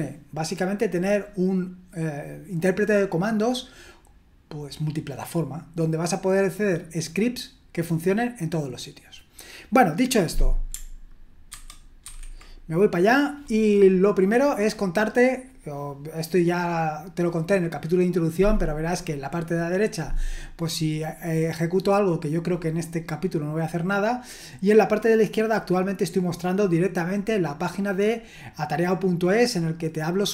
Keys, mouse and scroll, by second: 11.5 ctrl+2, 12.0 ctrl+1.